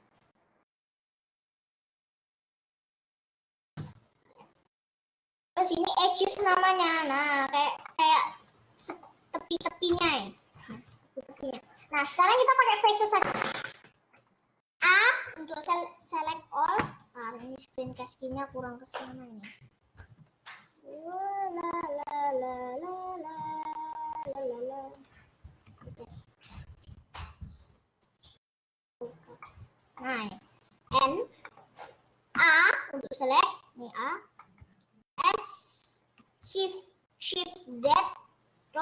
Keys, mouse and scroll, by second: 1.7 ctrl+z, 2.6 ctrl+z, 5.3-6.3 drag, 6.5 middle click, 6.9 scroll down 2, 7.9 middle click, 8.5 click, 8.9-9.9 middle drag, 9.9 g, 11.3 ctrl+z, 12.9-15.0 drag, 15.0 a, 15.5 scroll down 1, 18.4 n, 20.5-23.3 drag, 29.5-30.9 middle drag, 30.9 n, 31.4-31.8 scroll up 4, 31.8 middle click, 32.1 scroll down 4, 32.3 a, 34.4 middle click, 35.2 s.